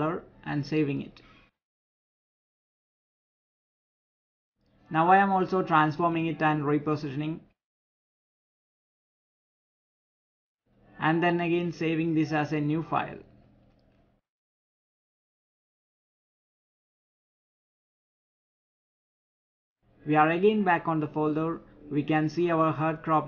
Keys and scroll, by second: 7.5 ctrl+t.